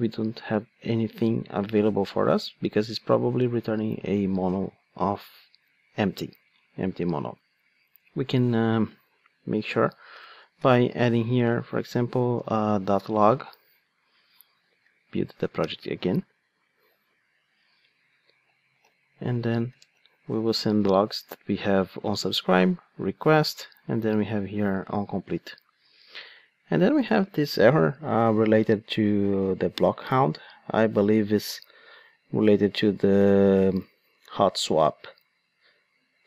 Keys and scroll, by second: 8.8 super+b, 12.7 Return, 14.7 super+F9.